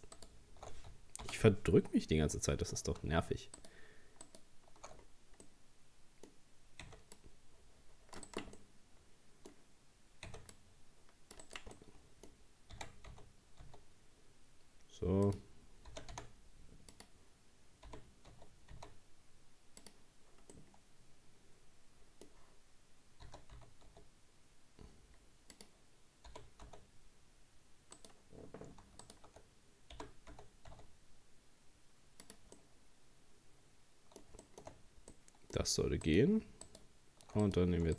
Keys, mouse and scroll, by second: 0.2 alt+shift+right click, 1.2 ctrl+z, 1.8-2.4 scroll up 4, 2.4-3.6 shift+middle drag, 3.6 alt+shift+right click, 4.3 alt+shift+right click, 5.0-5.5 scroll down 4, 5.5-6.9 middle drag, 6.9 c, 8.6-10.3 middle drag, 10.3 c, 11.8-12.8 middle drag, 12.8 r, 15.9 g, 17.9 g, 20.5-23.3 middle drag, 23.3 s, 29.0 alt+shift+right click, 30.0 g, 32.6-34.8 middle drag, 34.8 scroll up 1, 35.2 middle click, 36.1 right click, 36.7 alt+shift+right click, 37.4 right click.